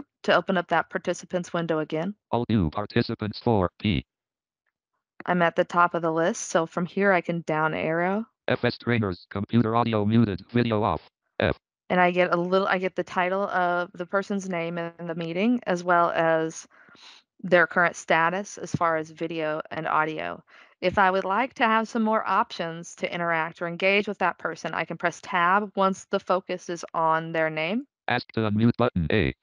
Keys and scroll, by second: 25.6 Tab.